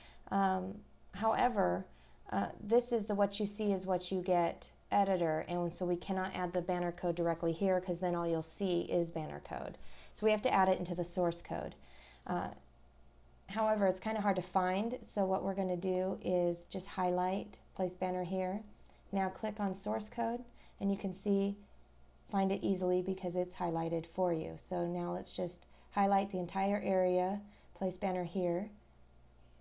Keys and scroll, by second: 20.7 scroll down 1.